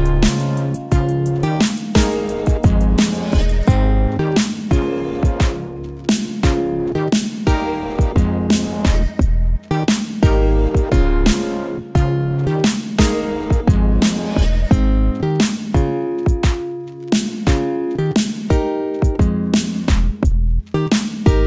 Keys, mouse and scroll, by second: 1.8 click, 2.6-3.5 typing, 9.5-19.5 drag.